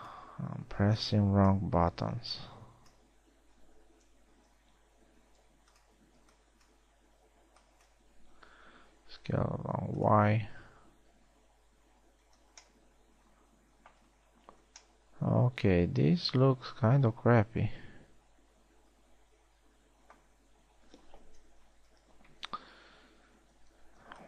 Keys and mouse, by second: 0.0 b, 1.4 b, 2.7 b, 5.0 s, 6.7 a, 6.8 b, 8.0 b, 9.6 s, 11.4 a, 13.3 z, 22.4 KP_3, 23.2 z.